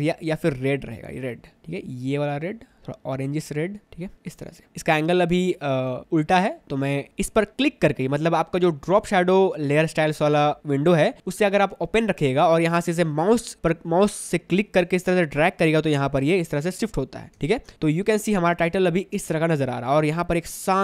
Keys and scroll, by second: 17.5 ctrl+alt+space, 17.9 ctrl+alt+space.